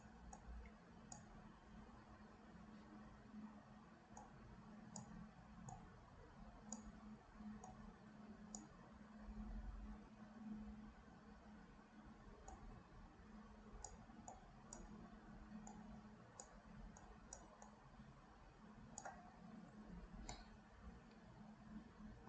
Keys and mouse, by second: 0.4 click, 2.1 KP_1, 4.1 click, 5.7-6.8 drag, 7.7 click, 12.5-13.9 drag, 14.3 click, 15.7 click, 17.0 click, 17.7-19.1 drag, 20.5-22.2 middle drag.